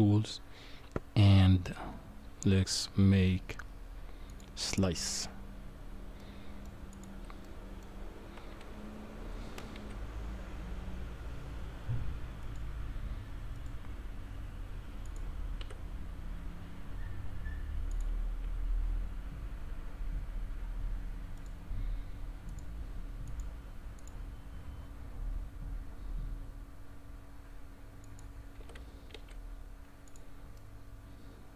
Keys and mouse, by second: 4.3 click, 6.2-6.6 drag, 7.4-7.8 middle drag, 8.5 g, 13.7-15.0 right drag, 15.6 q, 18.4 s, 22.5-24.1 drag, 25.3 s, 28.6 g, 30.6-31.5 middle drag.